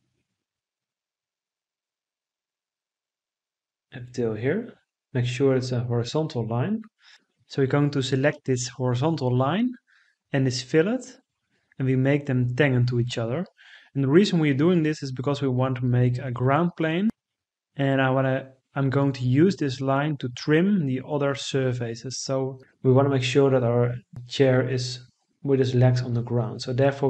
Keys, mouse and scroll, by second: 4.9 Escape.